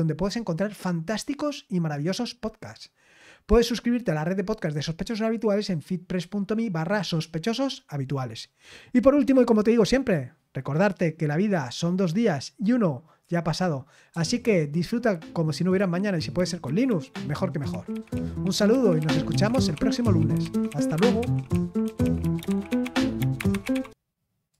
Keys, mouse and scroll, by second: 24.5 click.